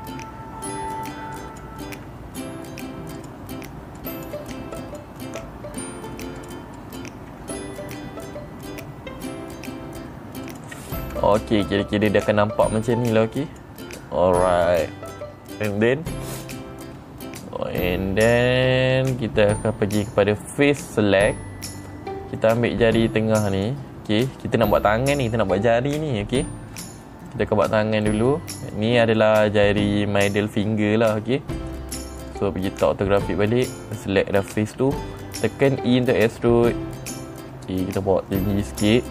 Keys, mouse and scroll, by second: 0.1 click, 1.8 click, 2.4 g, 3.7 click, 4.5 click, 5.2 click, 5.8 g, 6.9 click, 7.2 click, 7.8 g, 10.9 click, 11.6 middle click, 11.6 scroll up 2, 13.6 click, 17.4 scroll down 3, 17.4 middle click, 20.9 click, 22.2 middle click, 23.2 middle click, 24.0 click, 27.2 middle click, 28.1 middle click, 28.8 middle click, 29.7 middle click, 32.8 click, 34.9 middle click, 34.9 scroll down 2, 36.4 e.